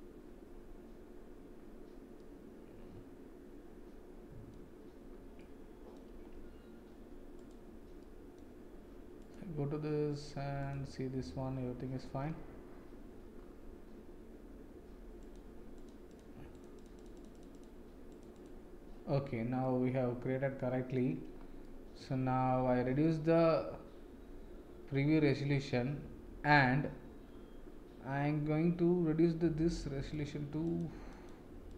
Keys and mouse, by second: 2.1-4.5 middle drag, 5.3 middle click, 7.3 click, 8.0-8.3 middle drag, 15.2 click, 15.8 click, 17.1 click, 17.3 click, 18.3 click, 19.6-20.9 middle drag, 21.6-23.0 middle drag, 29.5 click, 30.1 click, 30.6 click, 31.2-31.7 drag.